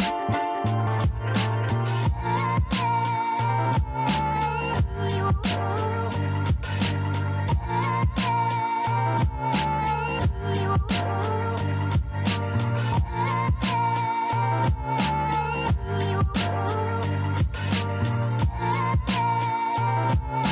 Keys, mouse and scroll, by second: 1.6 e, 5.6 g, 8.2-8.7 scroll down 1, 8.7-10.0 shift+middle drag, 10.0 click, 11.2 g, 13.3 s, 15.3 shift+z, 15.9 shift+z, 16.5 Tab, 17.3 click, 18.1 click.